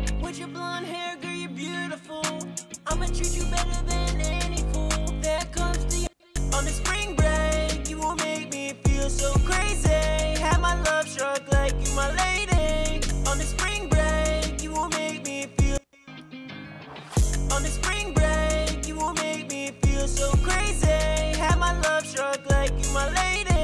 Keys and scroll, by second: 2.2 super+`, 4.9 ctrl+shift+Page_Up, 5.1 ctrl+shift+Page_Up, 12.8 alt+shift+d, 21.5 super+Tab.